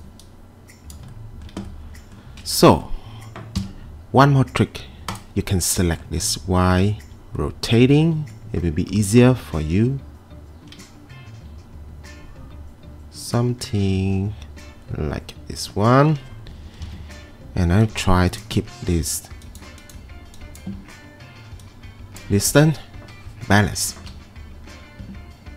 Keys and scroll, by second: 3.6 q, 16.9 ctrl+2, 23.9 Escape.